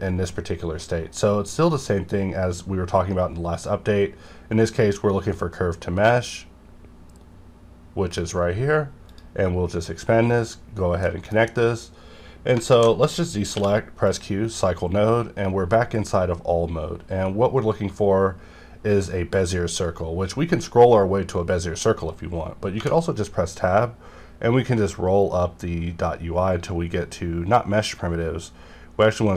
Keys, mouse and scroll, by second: 3.6 scroll down 1, 6.0-6.5 scroll down 1, 6.5 scroll up 1, 7.3 scroll down 1, 8.1 click, 8.1 click, 11.0 middle click, 11.3 scroll down 1, 12.7 alt+a, 13.5 q, 14.0 click, 14.4 scroll up 1, 15.3 scroll up 1, 16.0 scroll up 1, 16.8 scroll up 1, 19.9 scroll up 1, 20.4 scroll up 1, 21.1 scroll up 1, 21.7 scroll up 1, 23.9 scroll up 1, 24.7 scroll up 1, 27.7 scroll down 1, 28.5 scroll up 1.